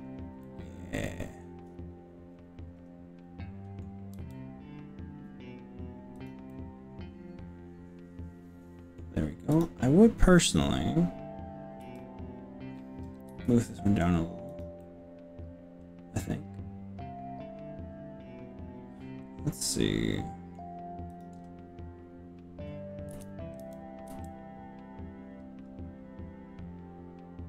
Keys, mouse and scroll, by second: 0.4-3.9 middle drag, 4.3 s, 6.2 click, 6.5-9.0 middle drag, 9.6 click, 11.8 g, 13.3 z, 14.7 click, 14.8-20.5 middle drag, 20.5 click, 21.1 click, 23.1 KP_3, 23.6 KP_3, 24.2 g.